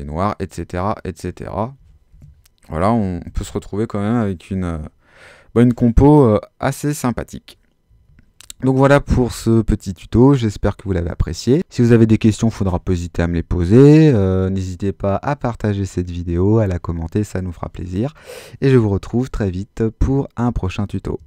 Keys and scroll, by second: 1.8 super+z.